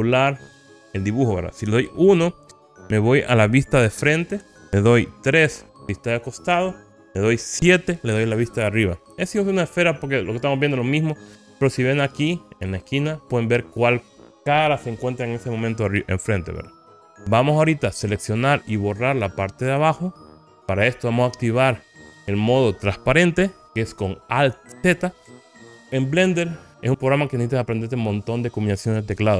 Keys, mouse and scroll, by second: 3.8 KP_1, 5.4 KP_3, 8.1 KP_7, 16.5 KP_1, 17.0 click, 17.5-18.1 scroll up 3.